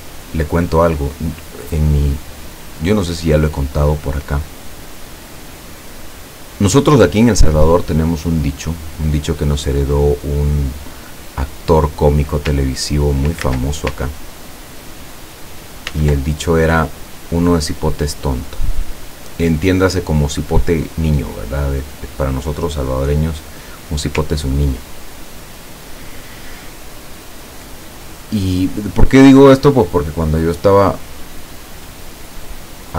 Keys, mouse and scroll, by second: 4.5 click, 8.7 click, 9.7-10.8 drag, 12.6 ctrl+click, 13.5 ctrl+z, 14.2-16.0 ctrl+drag, 15.9 ctrl+z, 16.9 click, 18.7 click, 19.7-22.2 drag, 24.7-31.8 ctrl+drag.